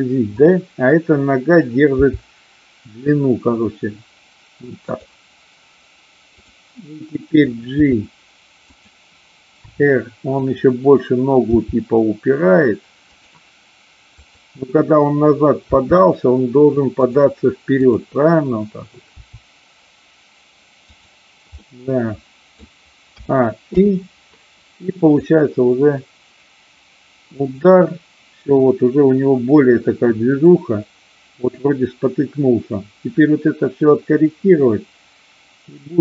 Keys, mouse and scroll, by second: 0.3 click, 2.0 g, 4.8 click, 7.7 g, 8.7 click, 9.7 r, 10.3 click, 11.4 g, 13.2 click, 14.1-15.2 drag, 15.7 r, 17.1 click, 17.8-18.7 drag, 19.2 r, 20.8 click, 21.6-22.6 middle drag, 23.1 a, 23.7 i, 25.1-36.0 drag.